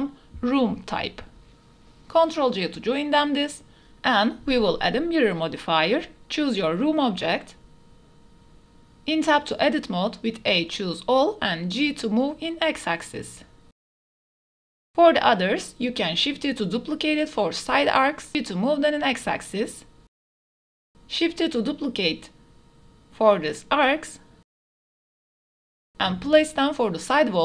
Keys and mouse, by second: 0.4 shift+click, 0.8 click, 2.8 ctrl+j, 4.5-5.7 drag, 4.5 KP_1, 7.5-7.9 middle drag, 8.5 drag, 8.7 middle click, 10.0 KP_1, 10.3 Tab, 10.6 a, 11.2 g, 11.6 x, 13.9 click, 14.3 click, 15.2 KP_1, 16.1 shift+d, 16.6 x, 19.7 click, 20.0 middle click, 20.3 Tab, 20.6 middle click, 21.2 s, 21.3 x, 22.2 click, 22.8 click, 23.0-24.1 typing, 24.1 Escape, 24.4-24.7 drag, 25.2 r, 25.4 z, 25.5 KP_9, 25.6 KP_0, 25.8 KP_Enter, 26.1-26.7 drag, 27.0-27.4 typing.